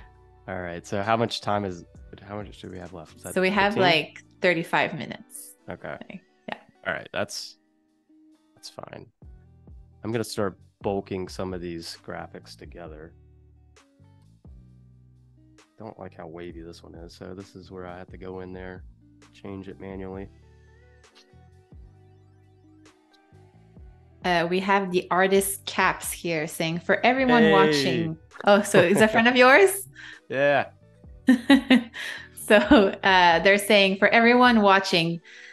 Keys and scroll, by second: 14.7 space, 16.4 -, 28.3 a, 31.2 space, 32.9 -, 34.7 a.